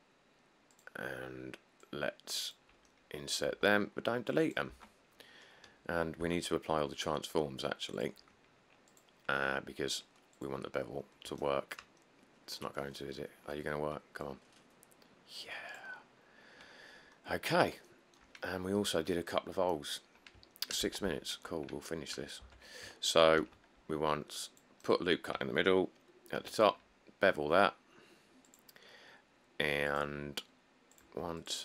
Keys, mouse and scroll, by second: 3.7 e, 4.9 Tab, 5.4-6.3 scroll up 2, 6.4 q, 16.3 middle click, 16.4 middle click, 16.4 middle click, 17.0 middle click, 18.6 middle click, 18.7 middle click, 18.7 middle click, 20.1 middle click, 20.2 middle click, 20.4 middle click, 21.3 1, 21.5 middle click, 21.6 middle click, 21.8 middle click, 22.6 Tab, 23.6 ctrl+r, 23.8 scroll, 26.6 ctrl+b.